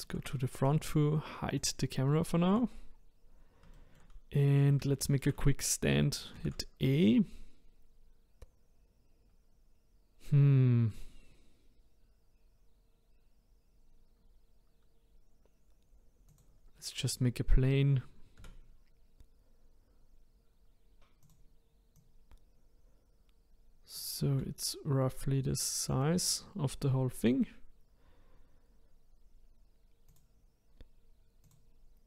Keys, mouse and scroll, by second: 1.6 click, 2.2-3.3 shift+middle drag, 3.3-3.7 scroll up 2, 3.7-4.2 shift+middle drag, 4.2-4.9 scroll down 2, 4.9-5.6 shift+middle drag, 5.6-6.4 scroll down 1, 6.4 shift+a, 17.3-18.4 scroll down 2, 18.4 s, 21.9 click, 24.3 s, 30.1 click, 31.4-32.0 drag.